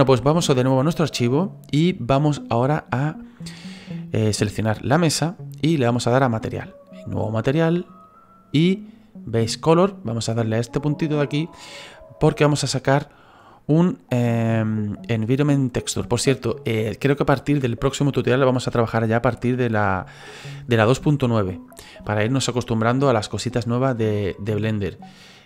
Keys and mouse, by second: 6.3 click, 7.8 click, 11.1 click, 12.9 click.